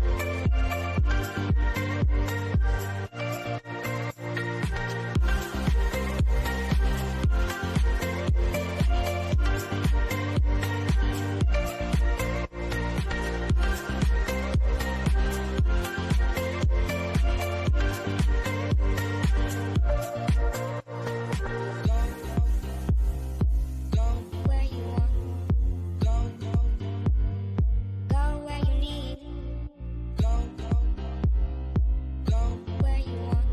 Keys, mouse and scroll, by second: 2.0 click, 6.9-8.2 scroll down 1, 8.9 scroll up 1, 11.7 click, 12.9 Up, 14.2 click, 16.6 click, 20.0 scroll down 1, 20.8-22.8 shift+middle drag, 22.8 click, 27.1 shift+', 27.4 Return, 28.6 click, 29.2-31.2 shift+middle drag, 31.2 click.